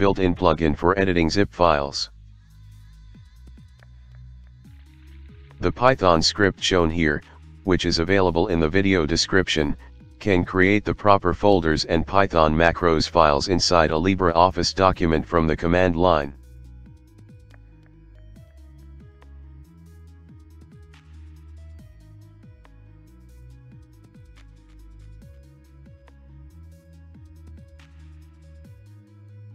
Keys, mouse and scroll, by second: 2.0 shift+;, 2.3 q, 2.4 Return, 3.6 ctrl+5, 3.9-5.1 typing, 8.3-9.1 typing, 10.5-14.7 typing, 16.2-22.1 typing, 21.5 Tab, 22.3 Tab, 22.7 Return, 25.5 ctrl+2.